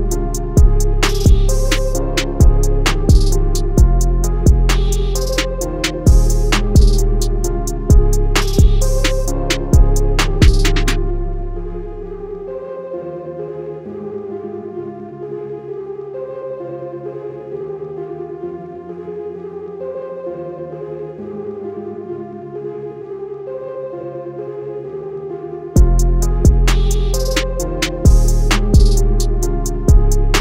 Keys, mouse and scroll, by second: 6.5 alt+scroll down 2, 7.8 alt+scroll up 1, 12.9 alt+Num_Lock, 12.9 scroll down 1, 14.9 scroll up 1, 15.5-16.0 scroll down 1, 16.3-16.8 alt+scroll down 3, 17.4 scroll up 1, 20.7 click, 25.9 ctrl+g, 27.2 click.